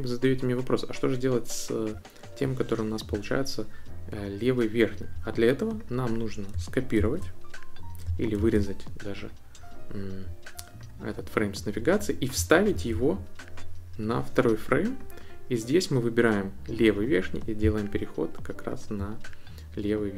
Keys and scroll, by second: 7.0 super+c, 8.4 super+x, 12.7 super+v.